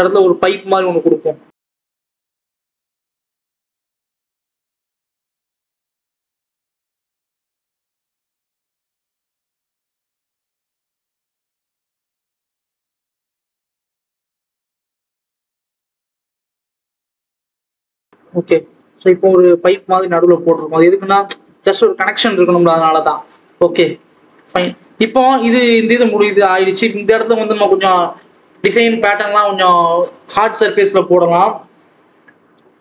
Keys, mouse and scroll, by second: 1.8 click, 2.9 shift+a, 3.4-4.2 scroll up 1, 4.8 click, 5.5 scroll down 2, 5.7 Tab, 6.0 r, 6.7 s, 8.0 click, 8.2-8.7 scroll up 1, 8.7 Tab, 8.8 g, 9.6 Tab, 9.8 s, 10.3 s, 11.2 click, 11.9-12.4 scroll up 9, 12.4 scroll down 2, 12.7 click, 13.9 x, 14.1 scroll down 1, 14.7 click, 14.9-15.5 scroll down 1, 15.5 click, 16.8 click, 17.1 x, 17.2-18.1 scroll down 7, 18.1 click, 19.7 scroll up 2, 19.9 Tab, 20.8 right click, 21.2 alt+a, 21.5-21.8 scroll up 1, 21.8-23.1 scroll down 2, 23.1 click, 25.1-25.7 scroll up 1, 25.7-26.1 scroll up 1, 26.1 click, 26.3 scroll down 2, 26.6-29.6 scroll up 1.